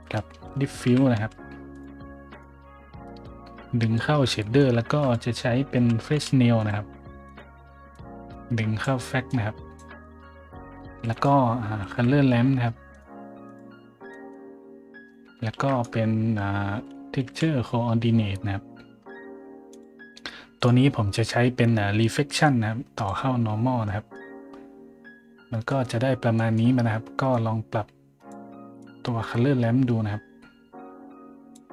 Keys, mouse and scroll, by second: 0.0 click, 0.9 d, 1.1 i, 1.7 click, 2.3 click, 3.2 click, 4.9-6.7 typing, 5.0 click, 6.6 click, 7.2 click, 7.9 click, 9.3 click, 10.0 middle click, 10.6 middle click, 10.9-12.8 typing, 11.1 click, 12.9 click, 13.5 click, 14.1 middle click, 15.6 shift+a, 15.7 click, 16.9-17.8 typing, 18.6-19.0 scroll down 2, 19.7 click, 20.6 click, 21.4 scroll up 1, 22.4-23.0 drag, 23.9 scroll up 1, 24.3 scroll down 1, 25.7 middle click, 26.3 middle click, 26.7-27.3 middle drag, 27.3-28.3 drag, 27.3-28.3 right drag, 28.8-31.5 drag, 28.8-29.7 right drag.